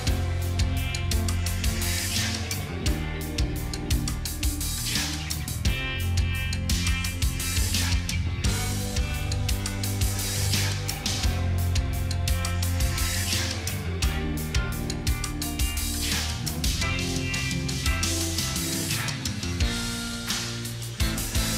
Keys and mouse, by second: 0.3 double click, 0.6 double click, 1.1 double click, 1.5 double click, 2.3 double click, 3.2 double click, 3.6 double click, 6.8 double click, 7.2 double click, 8.5 ctrl+z, 8.9 ctrl+z.